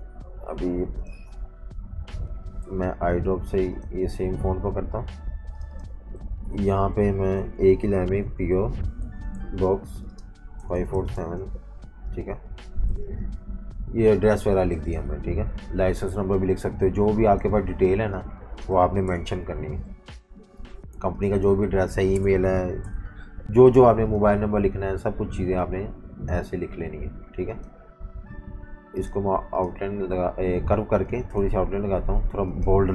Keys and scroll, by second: 1.4 v, 2.6 i, 4.5 v, 6.2-13.0 typing, 15.3 Delete, 17.7 typing, 19.0 shift+super+], 19.4 v, 22.1 BackSpace, 22.8 shift+p, 32.7-32.9 typing.